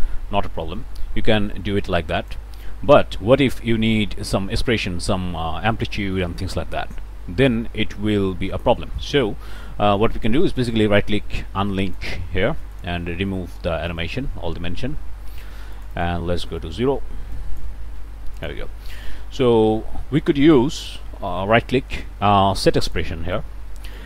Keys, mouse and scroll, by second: 10.4 click, 11.9 click, 12.6 click, 13.9 click, 15.7 click, 16.3 0, 16.6 Return, 17.3 click, 17.7 0, 18.0 Return, 18.4 click, 20.8 click, 22.9 click, 23.9 click.